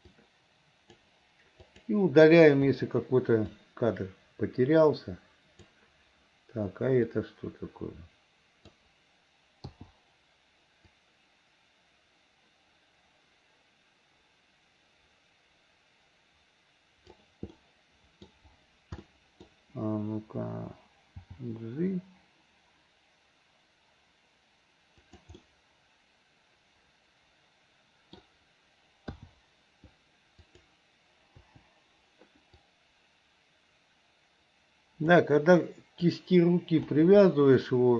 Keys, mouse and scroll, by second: 0.1 click, 0.2 click, 1.6 click, 2.8 Delete, 3.6-5.8 drag, 7.2-8.8 drag, 11.0-17.3 drag, 17.6 middle click, 19.1 middle click, 21.3 g, 25.4-26.4 scroll up 1, 26.4-28.2 middle drag, 28.2 scroll down 1, 29.2 i, 30.4 click, 31.5 Delete, 32.7-35.2 drag, 35.5 click, 36.9 Delete.